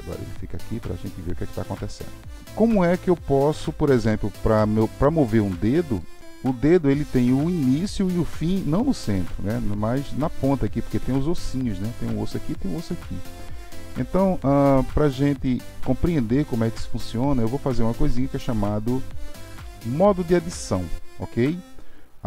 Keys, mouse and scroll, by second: 1.9-3.1 middle drag, 14.9-17.9 middle drag, 19.6 middle click.